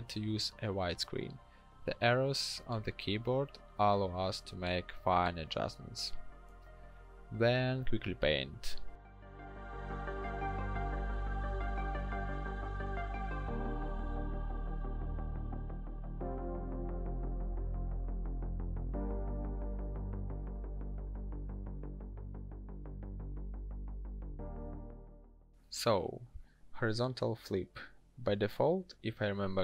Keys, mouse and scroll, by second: 7.9 l, 13.1 b, 13.9 ctrl+d, 15.7 b, 18.5 ctrl+e, 19.0 ctrl+shift+n, 26.4 ctrl+shift+x.